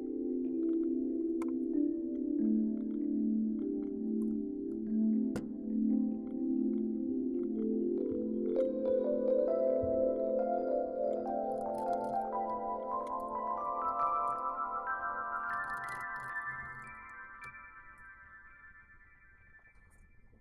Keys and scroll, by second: 4.1-4.7 Up, 11.2-17.1 typing, 13.3-13.9 Left, 17.4 Return.